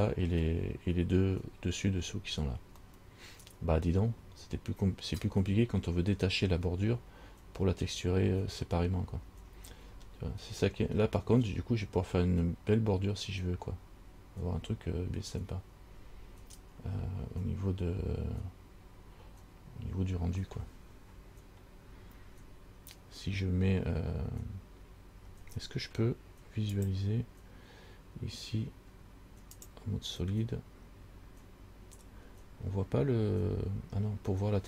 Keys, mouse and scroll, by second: 1.6-3.0 scroll down 9, 3.1 middle click, 3.1 scroll down 1, 4.3 scroll up 4, 9.7-10.8 scroll up 6, 21.9-22.5 scroll down 3, 23.2-25.2 scroll up 2, 26.9 click, 29.8 click.